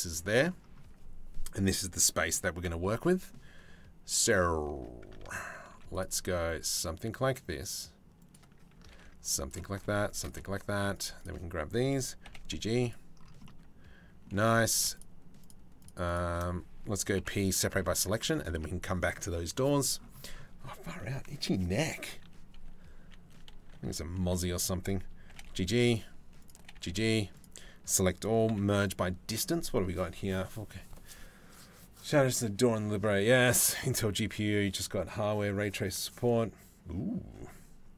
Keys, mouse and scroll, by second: 2.6 middle click, 4.8 ctrl+z, 5.3 ctrl+r, 8.5 ctrl+r, 9.4 ctrl+r, 10.3 2, 11.8 g, 14.1 3, 14.3 click, 14.6 shift+middle click, 15.0 middle click, 15.4 middle click, 16.8 p, 17.5 Tab, 18.1 Tab, 23.8 2, 23.9 middle click, 24.9 g, 26.2 g, 27.2 a, 28.1 m.